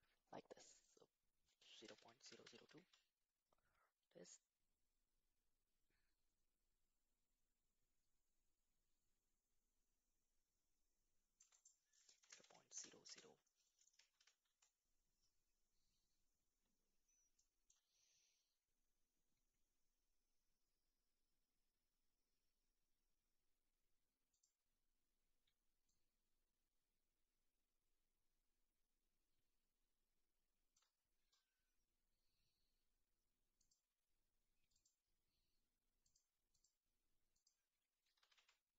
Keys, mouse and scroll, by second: 1.8-2.9 drag, 2.3 KP_0, 4.5-6.5 shift+drag, 8.0-14.6 shift+drag, 13.0 KP_0, 24.3 click, 25.8-31.1 shift+drag, 33.5 click, 34.7 click, 36.0 click, 37.4 click.